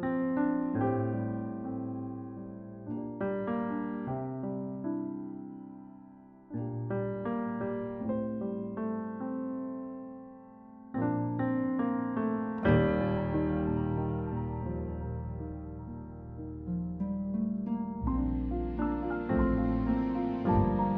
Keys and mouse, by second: 0.7 click, 11.4 click, 12.1 f, 12.4 f, 12.6 f, 13.5 click, 14.1 click, 17.8 click.